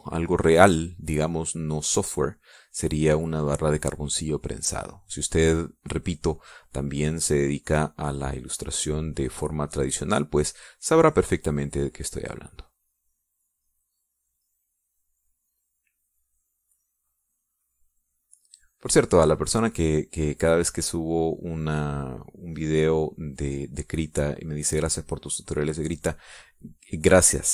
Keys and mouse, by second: 0.9-4.9 drag, 7.4 click, 11.6-14.9 drag, 15.3-16.7 middle drag, 17.5 middle click, 21.2-25.2 drag, 27.4 middle click.